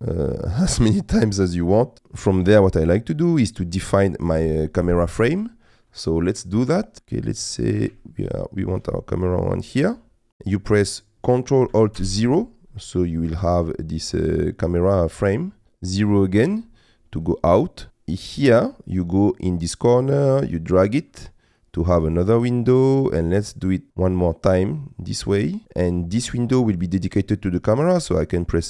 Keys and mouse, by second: 1.6 middle click, 7.0 middle click, 7.2 ctrl+middle click, 8.1 shift+middle click, 9.0 ctrl+middle click, 9.7 middle click, 12.0 ctrl+alt+KP_0, 15.6 KP_0, 17.2 middle click, 19.8-22.7 drag, 23.9-25.6 drag, 26.7 click.